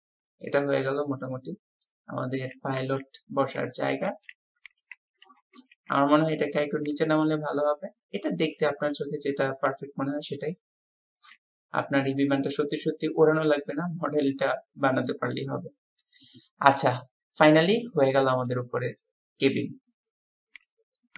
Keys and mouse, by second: 4.1 s, 5.7 w, 7.1-8.3 drag, 10.5-16.9 drag, 17.6-19.7 drag.